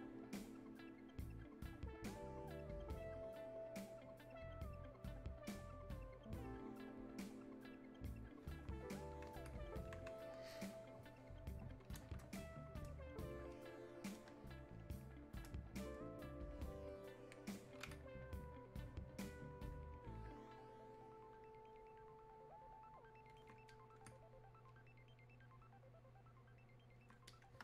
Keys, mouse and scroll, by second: 9.8-13.6 alt+drag, 14.3 space, 14.8 click, 14.8 space, 15.9-27.3 drag.